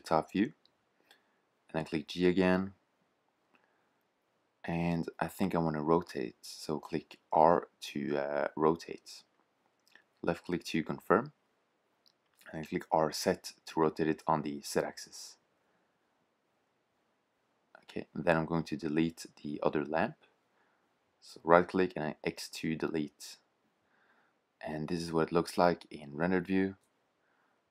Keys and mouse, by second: 1.0 g, 8.1 r, 11.1 r, 15.6 g, 21.0 x, 22.0 shift+z, 24.6 KP_0.